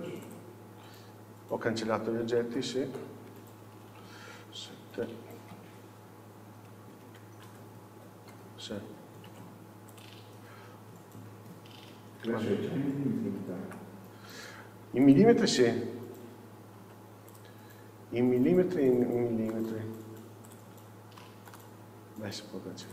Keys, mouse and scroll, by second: 1.6-2.6 scroll down 1, 2.6 ctrl+z, 3.3-5.6 scroll down 1, 5.6 KP_7, 6.4 scroll up 1, 6.7-7.6 scroll down 1, 7.6 ctrl+z, 8.6 scroll down 1, 9.4 alt+a, 10.0 click, 10.6-12.3 scroll down 1, 12.3-13.4 scroll up 1, 13.4 ctrl+c, 14.4 Escape, 15.1 click, 15.6 scroll up 1, 16.2-16.9 scroll down 1, 16.9 x, 18.1-18.5 scroll down 1, 18.5-19.6 scroll up 1, 19.6-20.5 shift+middle drag, 20.5 click, 21.6-22.9 right drag.